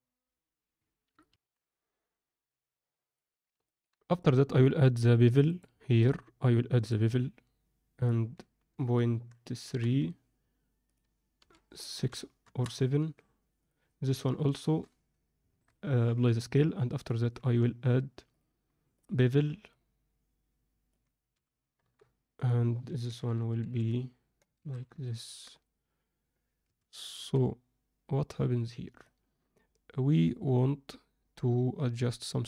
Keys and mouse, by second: 1.2 ctrl+F9, 1.4 ctrl+F10, 3.1 click, 3.7 ctrl+alt+middle click, 4.1 drag, 5.5 drag, 6.1-6.8 drag, 8.0-10.5 drag, 10.8-12.6 drag, 13.6 click, 15.5 ctrl+a, 17.5 ctrl+a, 19.0-19.7 drag, 20.9-21.9 drag, 22.5-24.4 drag, 24.5 alt+a, 25.0 ctrl+alt+middle click, 26.6 alt+a, 27.1 alt+a, 29.0-32.4 alt+middle drag.